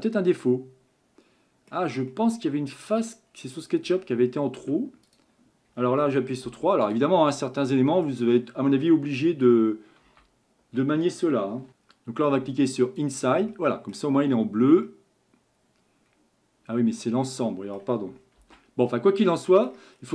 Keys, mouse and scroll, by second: 1.8 scroll up 1, 2.1-3.3 middle drag, 3.3-3.9 scroll up 2, 3.9 Tab, 4.6 Tab, 5.1 click, 6.5 3, 6.9 click, 7.3-10.1 middle drag, 10.1 shift+n, 12.8 click, 13.5-17.9 middle drag, 18.4 ctrl+z, 18.9 middle click, 19.8 scroll up 1, 20.0-20.1 scroll down 8.